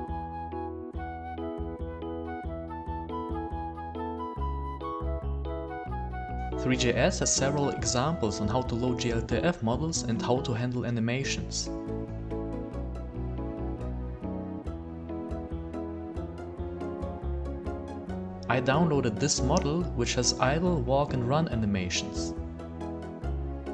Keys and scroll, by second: 0.7 w, 1.8 d, 2.8 w, 3.2 d, 4.4 w, 4.7 a.